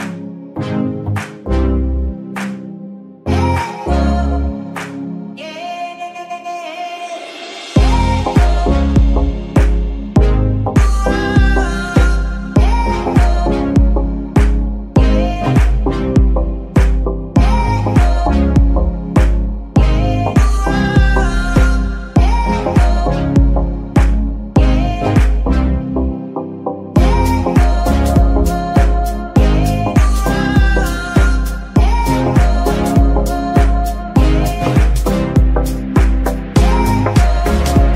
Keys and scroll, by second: 5.6 F2, 7.5-8.4 typing, 15.8 Tab, 16.0 s, 16.8 Tab, 17.2 s, 18.1 KP_3, 19.8 g, 19.9 y.